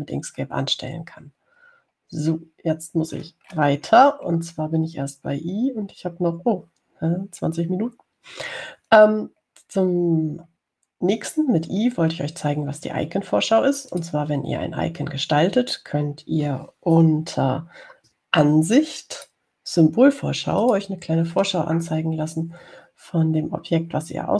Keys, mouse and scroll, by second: 3.3 scroll down 2, 4.3-5.2 scroll down 2, 10.3-10.8 scroll down 4, 15.2 click, 20.4 click, 21.9 click.